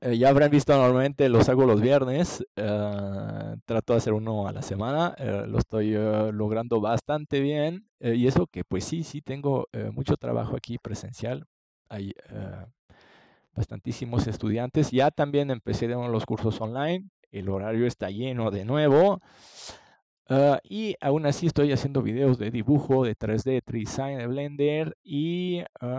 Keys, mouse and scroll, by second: 3.6 middle click, 6.3-9.4 middle drag, 10.0 ctrl+s, 13.4-14.9 drag, 14.9 right click, 17.2-20.8 drag, 22.0 l, 22.9 Left, 23.0 Left, 23.4 Left, 23.5 Left, 23.8 Left, 24.0 Left.